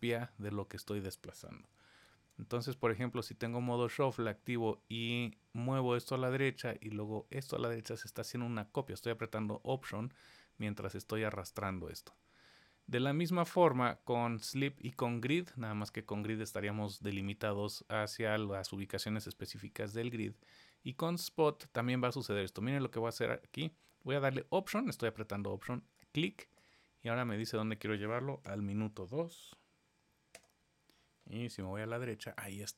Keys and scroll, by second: 1.6 super+z, 2.1 super+z.